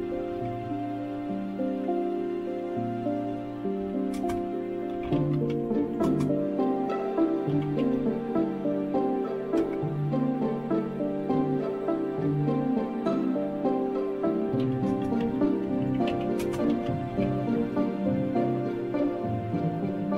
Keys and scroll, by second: 0.0-1.1 typing, 1.1 Return, 3.5-8.4 typing, 9.5 typing, 14.2-17.7 typing.